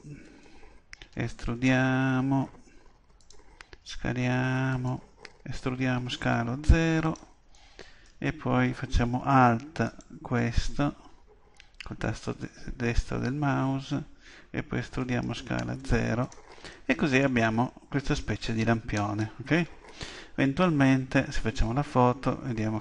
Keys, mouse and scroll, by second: 1.1 e, 3.3-6.7 drag, 3.7 s, 5.6 e, 7.1-8.9 drag, 7.5-9.4 middle drag, 9.9-15.0 right drag, 15.0 e, 16.3-18.1 drag, 16.7-21.7 middle drag.